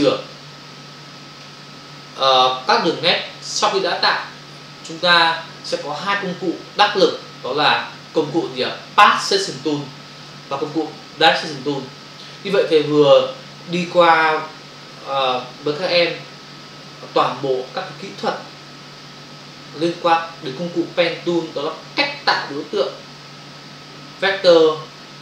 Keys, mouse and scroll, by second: 9.2 click, 9.4 click.